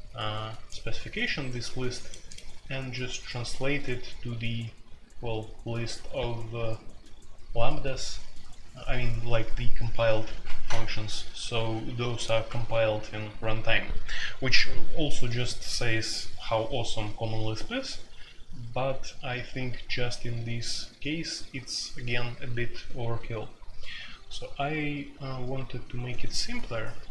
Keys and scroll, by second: 12.4 Escape.